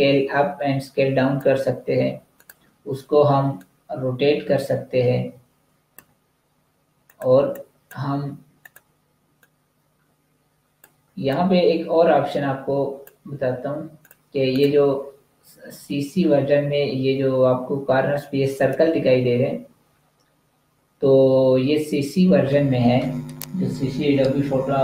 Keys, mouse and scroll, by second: 6.9 click, 7.3 space, 7.5 click, 7.7 space, 8.5 click, 10.9 z, 11.1 click, 13.3 v, 13.9 click.